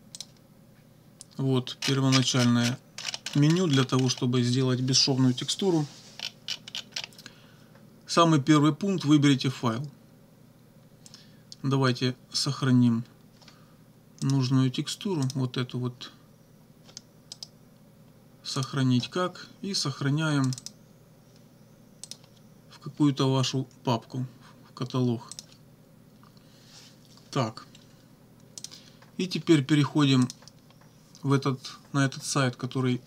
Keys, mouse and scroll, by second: 0.2 click, 1.8-2.9 scroll down 3, 3.0-3.6 scroll up 1, 3.6-4.2 scroll up 1, 6.1-7.2 scroll down 1, 14.3 click, 15.3 click, 17.3 right click, 18.6 click, 20.5 click, 22.1 click, 25.3 click, 28.6 click, 30.3 click.